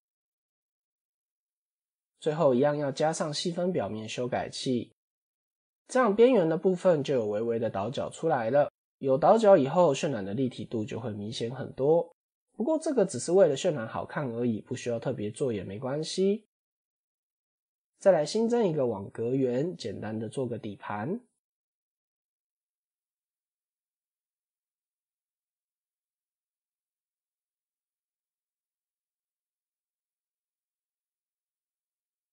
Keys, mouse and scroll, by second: 1.0 click, 3.1 ctrl+2, 3.5 scroll up 3, 4.0 middle drag, 4.2-4.6 scroll up 2, 5.3 middle click, 5.8-6.7 scroll up 2, 7.0-7.4 scroll down 4, 7.6-8.6 right drag, 9.0-9.5 middle drag, 9.5 scroll down 1, 11.1 KP_7, 11.8 scroll down 2, 17.4 scroll up 1, 18.2 shift+a, 22.8 ctrl+2, 23.1 s, 30.1 click, 30.5 s, 31.9 click.